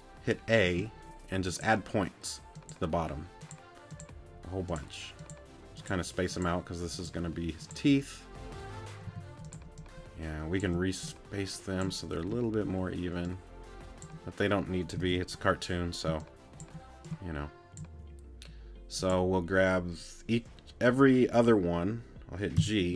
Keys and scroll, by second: 0.6 a, 9.1 t, 10.0 shift+t, 22.6 g.